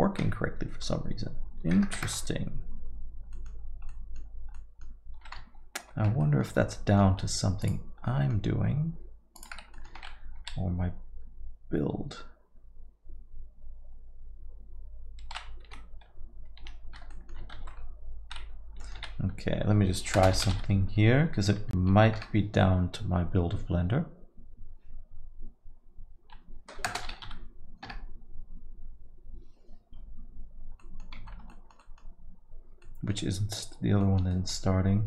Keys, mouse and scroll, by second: 3.4 middle click, 3.9 middle click, 4.3-4.7 scroll down 3, 4.6 middle click, 5.8 shift+F5, 6.2 middle click, 6.5 scroll down 2, 6.7 alt+middle click, 7.7 click, 8.1 alt+middle click, 8.4 alt+scroll up 1, 9.4 click, 9.8 middle click, 9.9 Tab, 10.4 s, 17.1 middle click, 17.9 ctrl+s, 18.8 middle click, 19.0 z, 30.8 middle click, 31.2 Tab, 31.5 alt+middle click, 31.8 middle click, 32.8 middle click, 32.9 alt+middle click, 34.0 middle click, 34.0 alt+middle click, 34.3 alt+middle click.